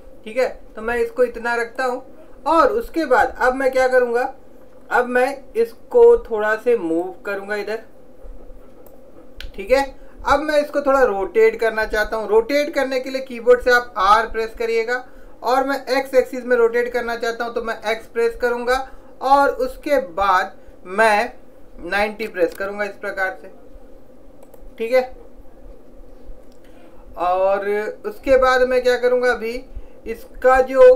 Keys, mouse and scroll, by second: 4.2-7.1 middle drag, 7.1-9.1 drag, 14.1 r.